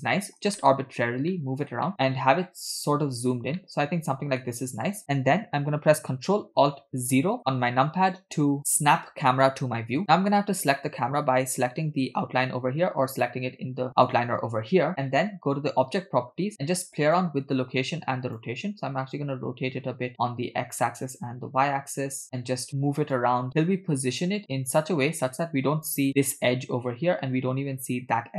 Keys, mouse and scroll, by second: 0.6-1.1 shift+middle drag, 1.3 middle click, 1.9-3.5 shift+middle drag, 3.6 middle click, 4.5 shift+middle click, 11.6 click, 17.2-18.5 drag, 19.2-20.8 drag, 21.7 click, 23.1-25.9 drag.